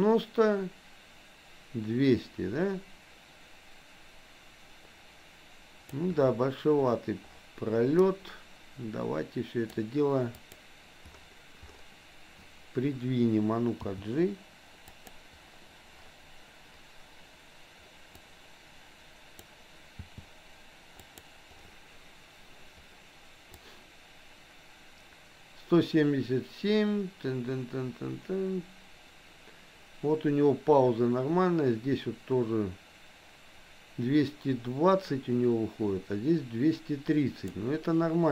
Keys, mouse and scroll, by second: 8.0-9.8 drag, 10.4 click, 13.8 g, 18.3-19.5 drag, 20.2 g, 23.7-37.7 drag.